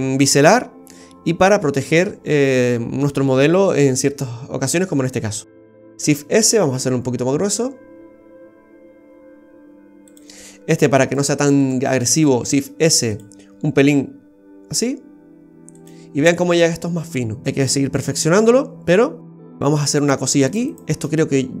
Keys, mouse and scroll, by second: 5.6 shift+s, 6.6 s, 11.0 right click, 11.4 alt+shift+right click, 11.7 alt+shift+right click, 12.4 shift+s, 13.5 s, 16.9-17.4 scroll down 3, 19.6 Tab, 20.0 right click, 20.5 alt+shift+right click, 20.7 alt+shift+right click.